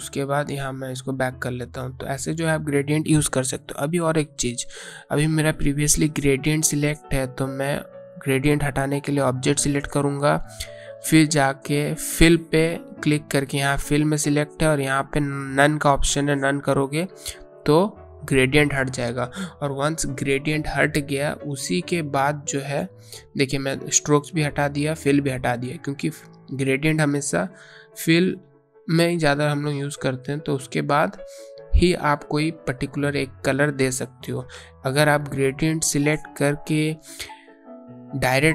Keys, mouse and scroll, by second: 0.1 click, 8.0 click, 13.3 click, 19.3 click, 22.5 click, 26.5 click, 27.6 click.